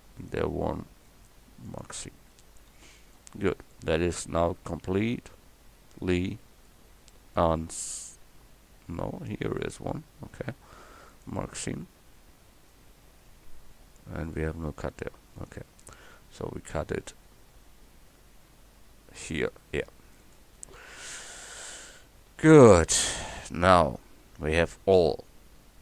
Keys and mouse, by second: 2.7 a, 11.7 a, 12.3 click, 14.0 middle click, 15.4 right click, 15.8 middle click, 16.3 middle click, 16.7 middle click, 20.2-21.3 drag, 21.3 middle click, 21.5 click, 21.8 middle click, 22.3 a, 22.8-25.1 middle drag.